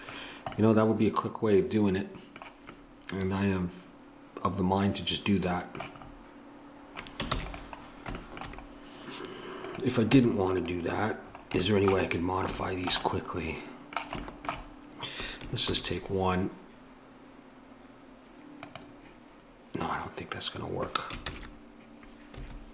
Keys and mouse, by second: 7.3 ctrl+s, 9.7 click, 10.1 Tab, 15.6 ctrl+r.